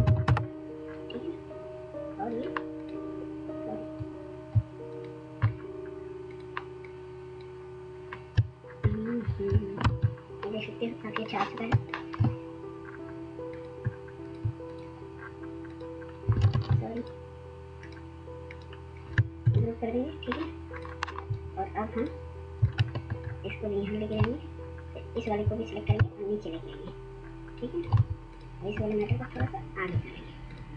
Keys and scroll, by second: 0.2 Return, 1.0 typing, 3.8 typing, 8.8 ctrl+[, 9.8 ctrl+0, 11.6 ctrl+[, 16.4 ctrl+z, 19.3 ctrl+g.